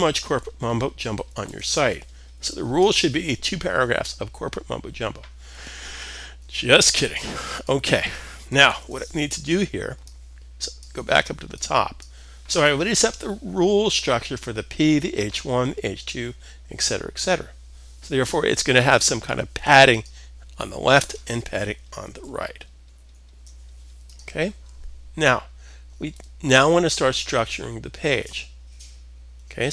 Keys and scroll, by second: 1.0 super+s, 8.2 super+s, 21.7 super+-, 22.4 super+=.